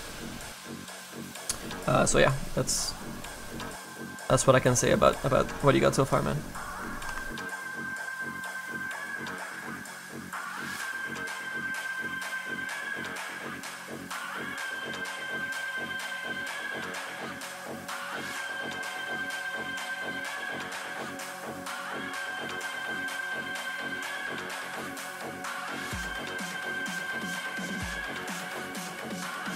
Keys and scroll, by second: 17.1 s, 22.8 s, 24.7 s.